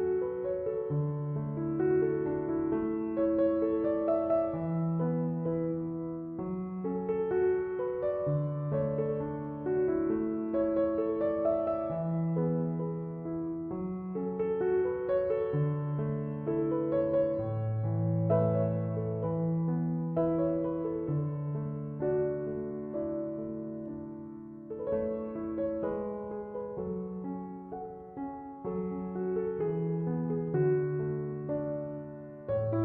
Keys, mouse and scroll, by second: 30.4 Escape.